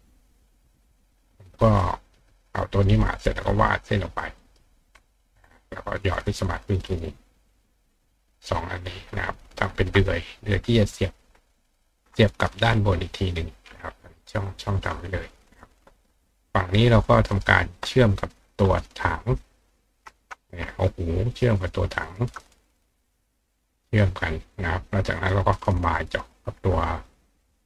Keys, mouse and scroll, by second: 1.8 click, 3.4-4.5 shift+drag, 4.4-6.8 shift+right drag, 6.2 click, 6.8 click, 7.5 click, 8.3 click, 8.7 click, 9.6 shift+click, 10.3-11.9 drag, 10.8-12.1 ctrl+right drag, 13.1 click, 13.9 click, 14.0-17.4 right drag, 14.5 click, 15.4 click, 17.1 click, 19.3 click, 19.6 click, 20.5 click, 21.3 shift+click, 22.0 shift+click, 23.6 click, 24.6 click, 25.0-26.0 drag, 27.0 shift+click.